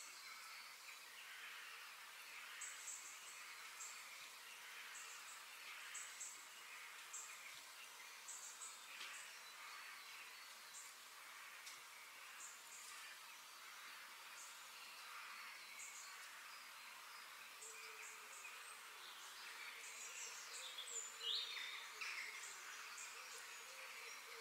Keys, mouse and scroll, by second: 8.3-8.6 scroll down 3, 8.6-10.5 middle drag, 11.4 g, 13.9 KP_3, 14.5-14.9 scroll up 2, 14.9 shift+middle click, 15.6 g, 17.1 middle click, 17.6 scroll down 2, 17.8-19.7 middle drag, 22.5 middle click, 23.4 KP_7, 24.2-24.4 shift+middle drag.